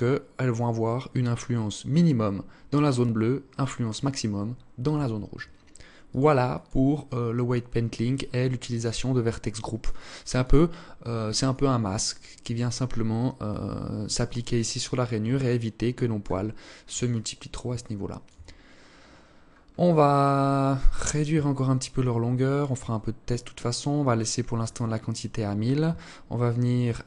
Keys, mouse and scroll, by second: 5.8 click, 9.0 click, 9.5 click, 14.6 alt+click, 15.7-16.3 scroll up 1, 16.3 alt+click, 16.9 alt+shift+click, 18.9-20.7 scroll up 10, 20.7 shift+click, 22.3 scroll down 2, 23.1-25.5 scroll down 8, 25.9 click, 26.3-27.0 scroll down 3.